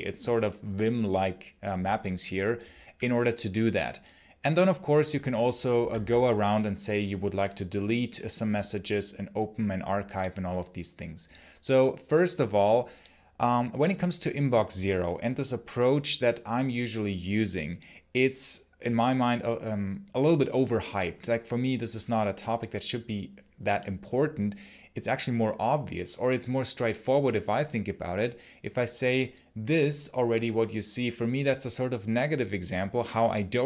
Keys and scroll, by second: 5.6 j, 5.8 j.